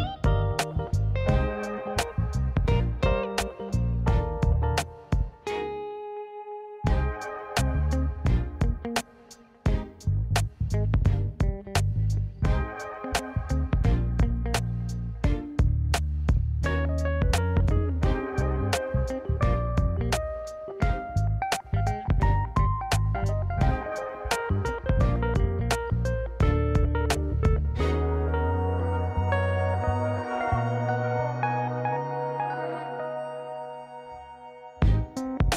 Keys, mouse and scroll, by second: 0.5-1.5 drag, 2.1-3.9 middle drag, 4.5 middle click, 5.4 middle click, 5.9 KP_1, 6.5 click, 7.6 click, 8.3 click, 9.8 click, 10.5 click, 11.2 click, 11.9 click, 12.5 click, 13.0 click, 13.2 middle click, 13.6 click, 14.1 click, 14.4 shift+click, 14.6 shift+click, 15.3 right click, 16.2 click, 16.5 click, 17.4 middle click, 17.8 click, 18.1 shift+click, 19.1 n, 20.0 click, 20.5 click, 21.0 click, 21.4 middle click, 21.7 click, 22.4 shift+click, 22.9 click, 23.3 middle click, 24.5 click, 24.7 click, 24.8 middle click, 25.1 scroll down 1, 25.2 scroll up 1, 25.3 middle click, 25.6-26.1 scroll down 2, 25.9 scroll up 1, 26.1 middle click, 26.1 scroll down 1, 26.3-26.7 scroll up 3, 26.6 middle click, 26.9 click, 27.1 Tab, 28.0 3, 28.4 middle click, 28.7 e, 29.7 middle click, 29.8 Tab, 30.1 middle click, 30.1 scroll down 1, 31.5 KP_1, 32.1 click, 32.3 scroll down 1, 32.6 shift+middle click, 32.9 click, 33.3 click, 34.1 scroll down 2, 34.5 shift+middle click, 35.3 click.